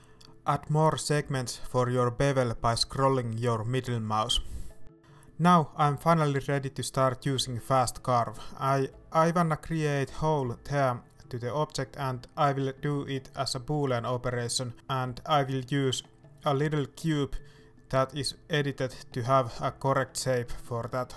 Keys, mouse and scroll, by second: 5.9 shift+a, 7.9 scroll down 1, 8.2 middle click, 8.7 scroll up 1, 9.6 middle click, 10.1 g, 12.8 middle click, 13.8 KP_1, 15.5-20.4 drag, 20.4 middle click, 21.1 alt+a.